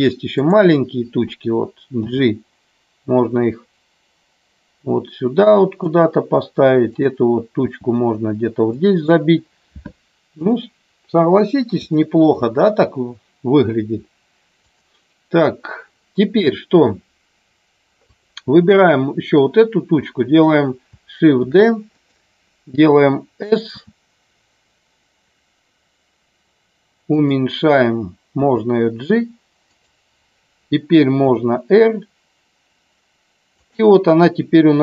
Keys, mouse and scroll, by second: 2.0 g, 5.9 click, 7.0 click, 7.6 g, 8.7 click, 10.2 click, 12.0 shift+middle click, 14.6 click, 21.3 shift+d, 22.0 click, 23.7 s, 27.1 click, 28.3 g, 29.6 click, 31.2 r.